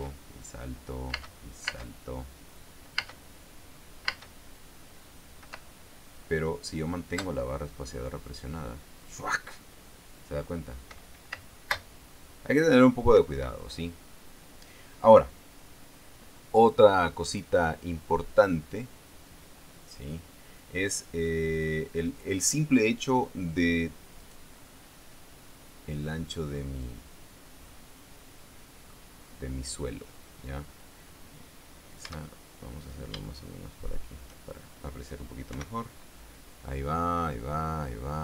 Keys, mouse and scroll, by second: 0.5 space, 1.7 space, 3.5 space, 4.6 space, 6.0 space, 11.9 space, 13.7 Escape, 24.7 right click, 25.2-29.6 middle drag, 29.8 scroll up 1, 32.7-34.9 shift+right drag, 36.0 p.